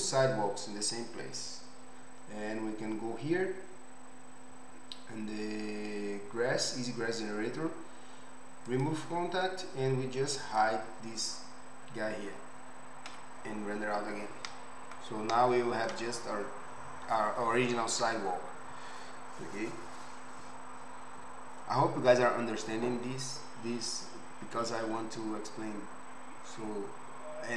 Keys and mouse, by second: 1.0-8.7 middle drag, 8.7 click, 8.8-10.4 middle drag, 10.4 click, 10.6-15.4 middle drag, 15.4-27.5 right drag.